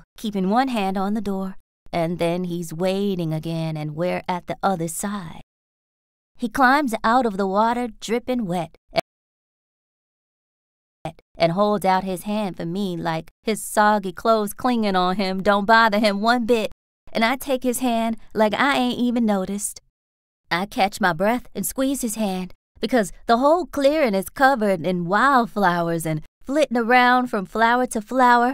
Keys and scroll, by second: 2.5 r, 3.9 t, 6.9 s, 8.9 space, 10.9 space, 12.2 b, 15.4 r, 17.9 BackSpace, 19.4 s, 22.0 r, 24.9 ctrl+s, 25.2 r, 26.0 t.